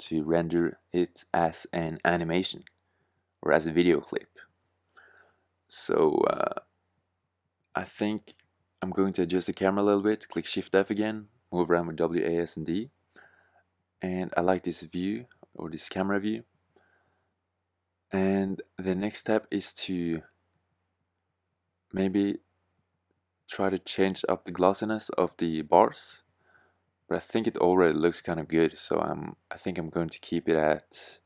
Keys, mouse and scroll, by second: 7.4 shift+f, 17.8-19.3 right drag, 19.3-21.4 middle drag, 21.9-23.0 drag.